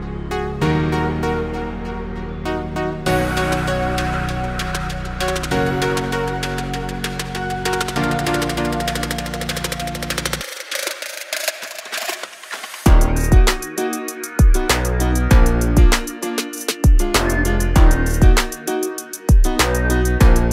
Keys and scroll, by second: 3.0-4.2 typing, 6.1-7.6 typing, 10.1 space, 12.2 p, 13.1 2, 13.4 0, 13.7 Return, 14.2 space, 17.3 r.